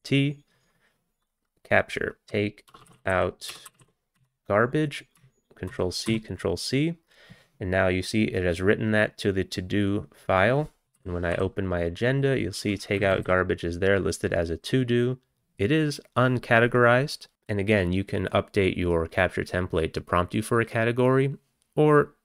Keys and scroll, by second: 2.2-4.6 typing, 5.7 ctrl+c, 6.1 ctrl+c, 10.8 ctrl+c, 11.0 a, 11.4 t, 13.0 Down, 13.2 Down, 13.2 Down.